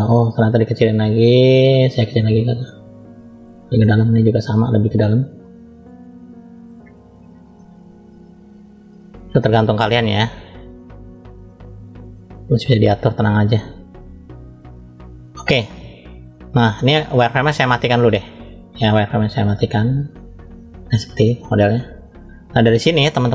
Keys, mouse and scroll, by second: 0.2 f, 2.2 click, 2.9 click, 3.4-5.4 drag, 5.4 KP_3, 6.5 click, 7.7 click, 8.9 click, 9.8 click, 11.0 click, 11.3 click, 11.7 click, 12.2 click, 12.3 click, 13.3 click, 13.8 click, 14.0 click, 15.1-15.7 scroll down 1, 15.7 scroll down 1, 19.0-20.5 drag, 21.2-21.9 scroll down 1, 21.9 middle click, 21.9 scroll down 1, 23.2-23.3 scroll up 1.